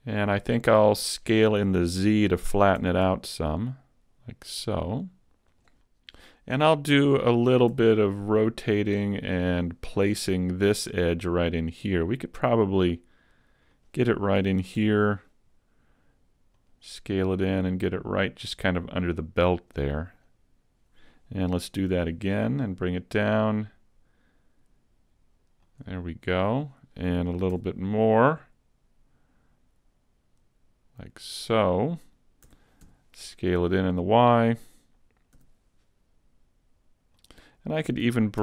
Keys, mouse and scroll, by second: 2.8 s, 7.7 r, 9.6 click, 10.1 g, 13.9 click, 14.4 s, 16.7 click, 16.7 s, 17.7 click, 21.8 e, 25.7 click, 27.5 e, 31.3 click, 32.5 s, 34.3 click, 35.3 g, 35.7 click, 35.7 g, 37.3 click.